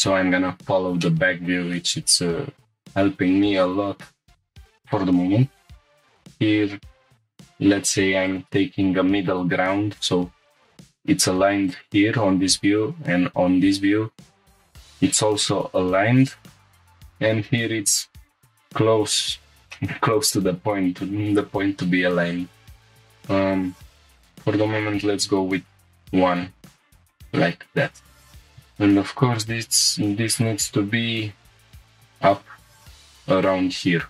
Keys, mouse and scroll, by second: 0.4-0.8 scroll up 5, 1.0 shift+middle click, 1.8 scroll down 1, 2.3 scroll up 1, 3.8 scroll down 3, 4.4 scroll up 1, 5.9 scroll up 2, 7.0 scroll up 1, 8.3 click, 11.7 click, 15.0 s, 15.2 x, 16.3 shift+click, 19.4 click, 19.7-20.0 shift+middle drag, 20.1 scroll down 1, 20.5-21.0 scroll up 2, 21.8 ctrl+r, 23.8 right click, 24.7 g, 24.9 x, 27.2 click, 28.0 click, 28.3 shift+middle click, 28.3 g, 28.3 z, 29.4 right click, 30.3 click, 31.7 z, 31.7 g, 33.4 click, 33.8 scroll down 1.